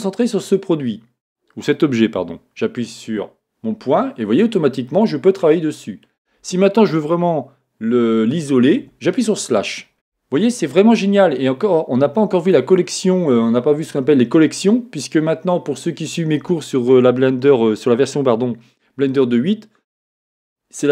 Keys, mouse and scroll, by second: 4.1-4.9 scroll down 1, 4.9 middle click, 8.8 KP_Divide, 9.6 scroll down 1, 11.1 middle click.